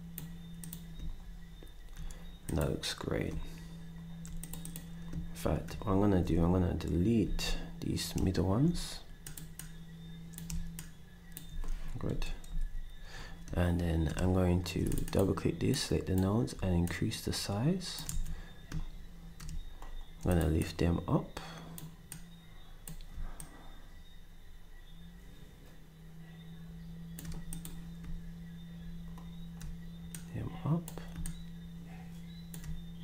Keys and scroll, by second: 7.2 ctrl+shift+s, 12.1 End, 12.5 Delete, 18.7 s.